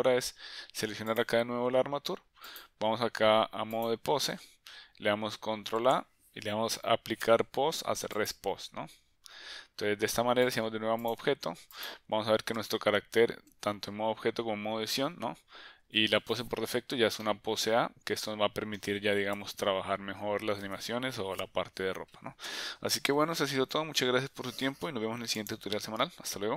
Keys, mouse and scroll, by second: 1.1 click, 2.5-3.9 drag, 5.8 ctrl+a, 10.5-11.1 drag, 11.8 click, 12.7 Tab, 14.2 Tab, 15.0 Tab, 16.4 Tab, 17.2-18.9 middle drag, 19.4 KP_1.